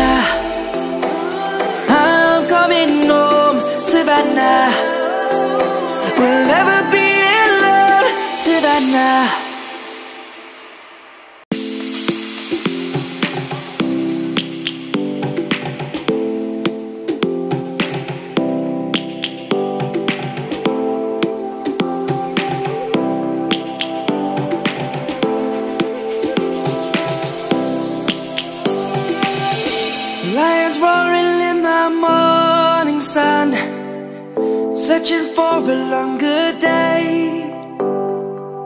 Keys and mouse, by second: 1.6 click, 2.6 shift+s, 3.4 click, 4.7 shift+a, 6.4 Tab, 8.6 Escape, 12.8 shift+a, 13.9 click, 17.8 s, 19.4 click, 23.4 s, 29.6 middle click, 31.0 shift+middle click, 32.1 click, 33.0 middle click, 35.4 click, 35.7 middle click.